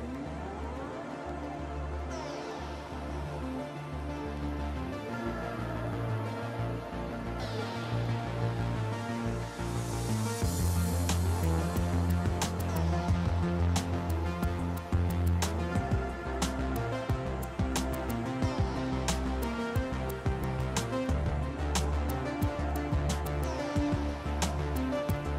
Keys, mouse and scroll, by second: 0.9 click, 3.1-6.0 drag, 8.3 middle click, 8.9-10.1 shift+middle drag, 10.3 shift+Tab, 10.9 shift+middle click, 11.5 a, 11.9 ctrl+Tab, 12.7 ctrl+click, 13.2 ctrl+middle click, 15.3 shift+right click, 16.2 shift+right click, 17.1 shift+right click, 18.9 shift+right click, 19.9 shift+right click, 20.5 shift+right click, 21.1 shift+right click, 23.3 ctrl+e.